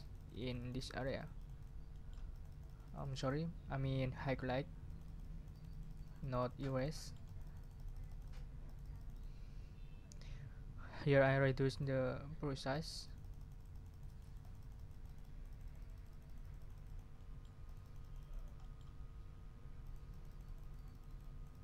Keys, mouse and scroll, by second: 1.9-3.4 drag, 4.8-8.5 drag, 8.6 click, 11.6 click, 12.7-17.6 drag, 17.6-19.0 drag, 19.8-21.6 drag.